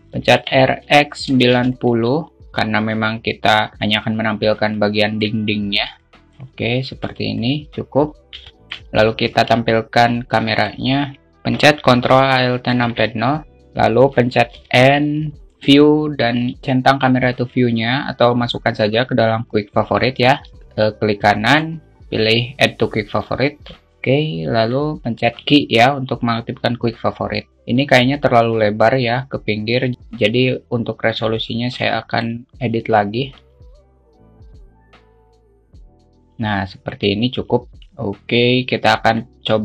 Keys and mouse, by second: 1.7 r, 2.8 r, 5.2-5.7 alt+middle drag, 6.1-7.5 drag, 9.0 shift+middle click, 9.7 shift+a, 16.0 click, 16.0 n, 17.8 click, 19.8 space, 20.5-23.9 right drag, 20.5 space, 25.1 n, 25.8 q, 29.9-32.5 drag, 32.7-34.6 drag, 35.5-37.4 alt+shift+middle drag, 37.7 q.